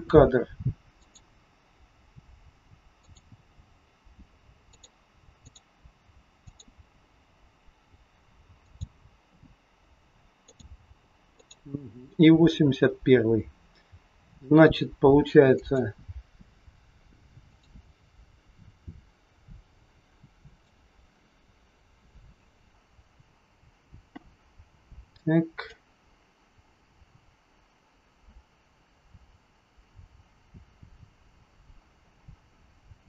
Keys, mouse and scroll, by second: 1.0 click, 3.1 click, 5.4 click, 6.5 click, 10.5 click, 11.4 click, 15.6 click, 17.5 click, 20.5 click, 22.4 click, 25.8 click.